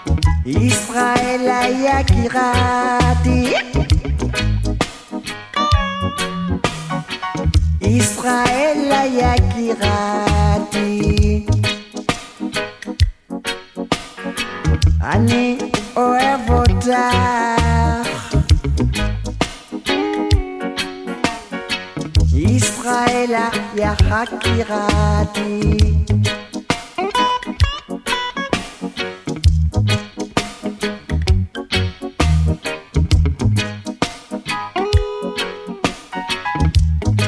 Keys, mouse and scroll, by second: 3.1 shift+click, 6.8 shift+click, 8.3 shift+click, 13.1 ctrl+click, 15.6 ctrl+click, 17.8 shift+click, 19.3 click, 21.0 ctrl+click, 24.6 ctrl+click, 26.3 shift+click, 29.5 shift+click, 37.0 shift+click.